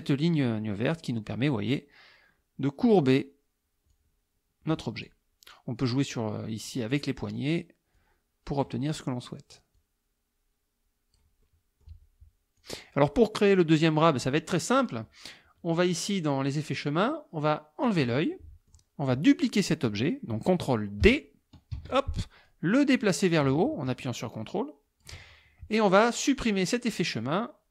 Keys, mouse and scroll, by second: 1.3-3.1 drag, 3.9-5.3 drag, 6.1-7.2 drag, 8.0 click, 9.8-11.4 drag, 11.5 middle click, 11.5 click, 12.6 click, 17.9 click, 18.4 middle click, 21.8 ctrl+d, 22.5-25.2 drag.